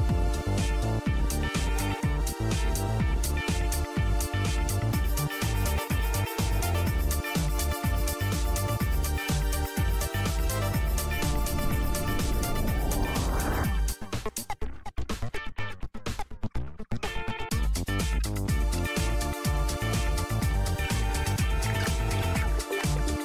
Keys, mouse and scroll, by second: 1.3 click, 1.5 click, 2.1 y, 3.1 y, 3.7 y, 4.7 y, 5.5 3, 6.9 1, 8.1 3, 10.7 1, 11.7 1, 13.1 1, 13.6 2, 15.3 2, 17.8 3, 18.5 4, 20.5 2, 21.4 2, 23.0 1.